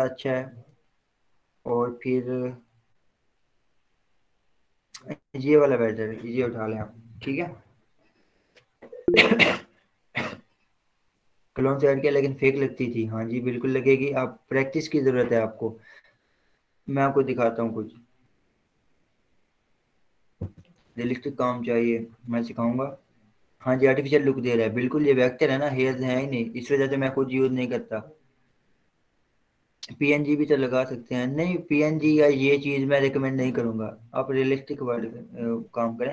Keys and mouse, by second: 1.6-7.5 drag.